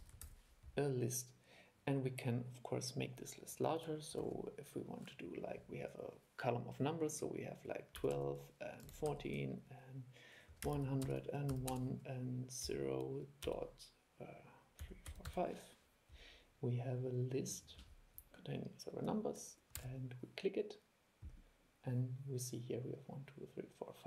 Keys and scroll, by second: 4.4 super+2, 19.9 super+e.